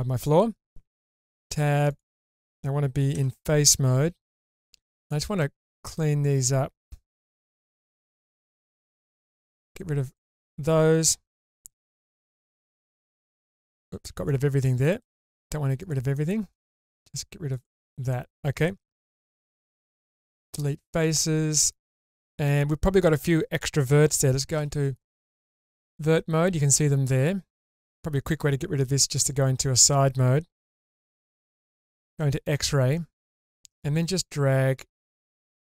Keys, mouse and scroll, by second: 0.1 middle click, 1.2 Tab, 1.9 click, 3.1 3, 4.0 Tab, 5.0 click, 5.4 middle click, 7.2 3, 8.1 click, 9.1 middle click, 10.1 ctrl+shift+click, 11.5 x, 14.1 ctrl+z, 14.3 middle click, 15.0 click, 15.8 click, 16.1 middle click, 17.5 ctrl+click, 18.1 middle click, 19.7 x, 20.9-22.9 middle drag, 23.2-23.9 scroll up 2, 24.5 1, 25.3-28.9 middle drag, 29.2 shift+middle click, 31.7 alt+z, 33.7-34.2 scroll up 2, 34.2-35.5 drag.